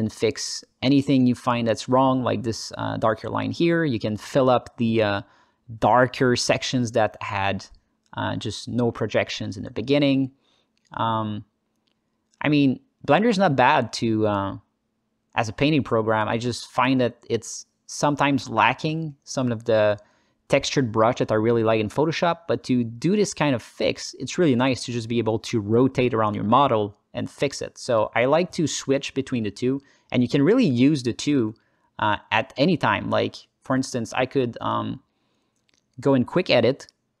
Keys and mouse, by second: 0.5 click, 0.8 middle click, 1.5-2.5 drag, 3.0 click, 3.4 click, 4.3 s, 4.5 click, 5.9 s, 6.1 click, 7.0 s, 7.4 click, 8.0-10.3 alt+middle drag, 10.6 alt+middle click, 11.7 s, 12.1 click, 13.0 click, 13.6 ctrl+alt+click, 13.8 ctrl+alt+click, 14.5 alt+click, 16.0 s, 16.2 f, 16.7 click, 17.1 alt+click, 17.9 s, 18.1 click, 19.4 s, 19.8 click, 20.9 f, 21.5 click, 23.1 f, 23.9-31.6 drag, 31.7 alt+click, 32.1 shift+click, 32.7 alt+click, 33.0 shift+click, 33.2 alt+click.